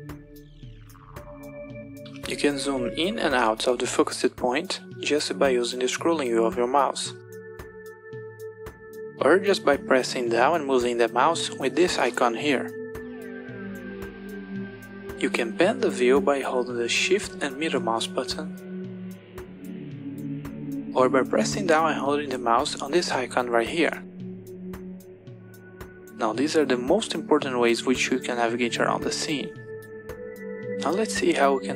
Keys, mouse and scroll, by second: 4.7-5.3 scroll up 4, 5.3-6.0 scroll down 4, 6.0-7.0 scroll up 3, 7.0-7.9 scroll down 3, 7.9-8.6 scroll up 1, 11.1-13.1 drag, 15.1-16.4 middle drag, 17.1-19.1 shift+middle drag, 25.4-27.9 drag.